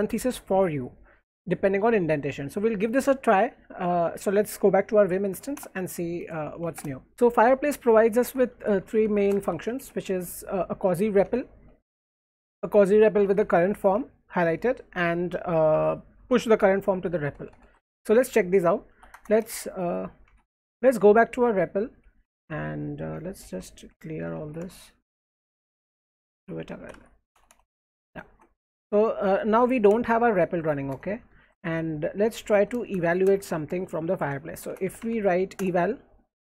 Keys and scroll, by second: 5.4 ;, 8.5-12.2 typing, 13.2 w, 13.4 w, 14.7-16.6 typing, 17.4 alt+Right, 17.5 alt+Right, 18.9-20.7 typing, 19.1 Return, 23.2 ctrl+c, 23.6 ctrl+d, 24.0-28.2 typing, 29.4 alt+Left, 29.9-30.6 BackSpace, 30.9 Return, 31.3 alt+Right, 32.1-35.6 typing.